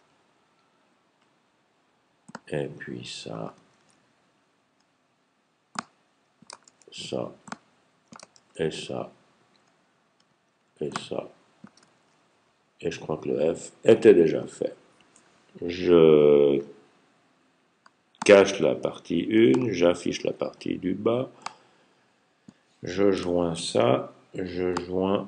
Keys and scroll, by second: 3.5 super+j, 6.4 super+j, 6.6 super+j, 8.2 super+j, 11.8 super+j, 23.5 super+j.